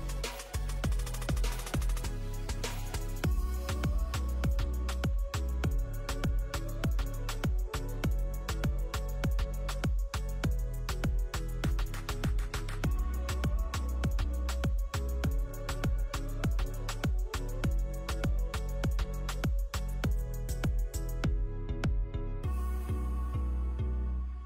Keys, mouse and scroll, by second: 2.4 scroll up 1, 2.6 Tab, 2.7 click, 2.8-3.3 scroll down 2, 3.0 click, 3.4 Tab, 3.6 a, 3.8-4.1 scroll up 5, 4.0 s, 5.0 Tab, 5.2 click, 5.3-5.8 scroll down 6, 6.3 click, 7.6 click, 7.8 click, 8.1 click, 8.7-9.4 scroll up 7, 8.9 click, 9.6 click, 9.9 scroll down 2, 10.0-10.4 scroll up 6, 12.0 Delete, 12.2 click, 12.8 click, 13.5 click, 14.4 click, 14.8 click, 15.7-16.2 scroll down 3, 15.8-16.2 scroll up 6, 16.2 click, 16.6 click, 17.1 click, 17.9 click, 18.1 click, 18.4 click, 18.6 click, 18.8 click, 19.0 click, 19.7 click, 20.9 click, 21.1 click, 22.4 middle click, 22.8 shift+middle click, 23.3 click, 23.6 Tab, 24.3 s.